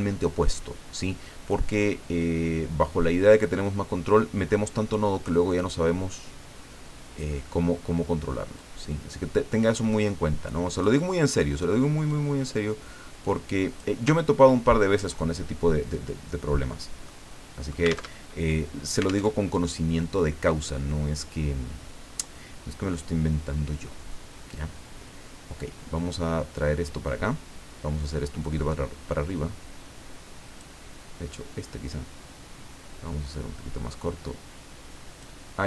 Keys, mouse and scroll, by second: 2.2-5.5 drag, 8.6-11.0 drag, 12.1 click, 14.1-15.1 ctrl+drag, 17.1 click, 18.2 alt+Tab, 19.3 alt+Tab, 24.5-27.3 drag, 28.4-30.8 drag, 31.9-35.5 drag.